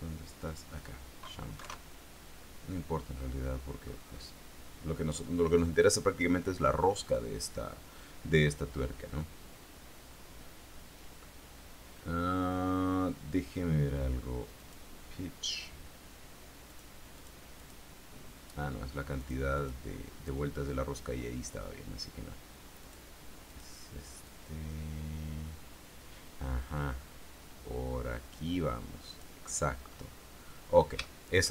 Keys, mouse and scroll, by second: 0.6 click, 1.7 KP_0, 4.0-4.6 scroll up 2, 10.7-11.7 scroll down 4, 12.3 scroll down 2, 14.8 click, 16.8 click, 17.1 middle click, 17.3 click, 17.8 click, 19.4 click, 19.7 click, 23.0 click, 23.3 middle click, 23.6 click, 24.4-29.6 drag, 29.6-31.1 middle drag.